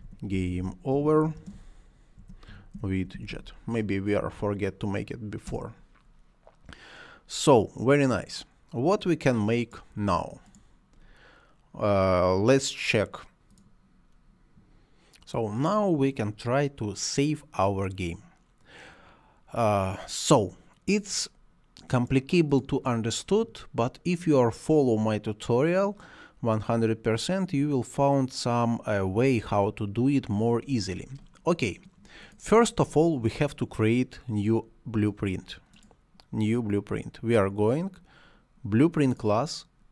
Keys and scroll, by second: 0.0-3.8 typing, 5.4 Return.